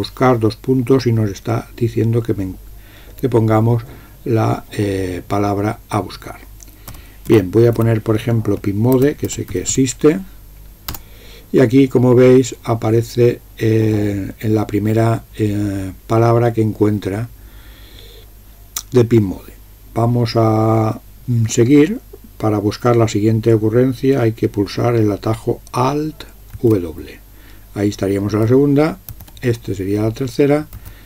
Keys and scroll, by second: 7.0-10.3 typing, 10.9 Return, 26.6 alt+w, 29.2 alt+w, 30.8 alt+w.